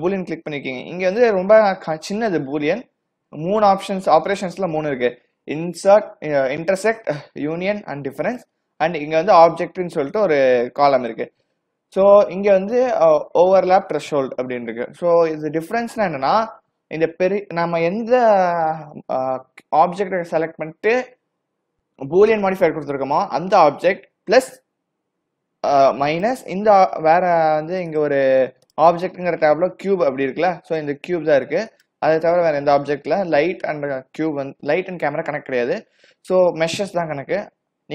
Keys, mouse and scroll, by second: 0.7 click, 4.4 click, 9.3 click, 26.2 click, 28.7 click, 32.7-33.1 scroll up 3, 33.1-34.1 scroll down 4, 34.2-34.9 scroll up 2, 34.9-35.4 scroll down 1, 35.4-37.4 scroll up 3.